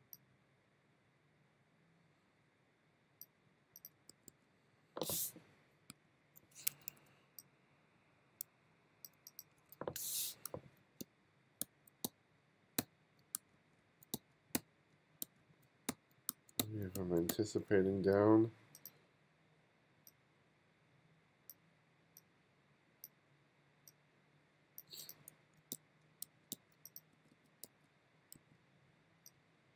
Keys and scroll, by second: 4.1 b, 4.8 b, 6.1 alt+Down, 6.8 2, 9.5-14.2 typing, 15.3-17.8 typing, 25.4-27.2 typing, 28.9 b.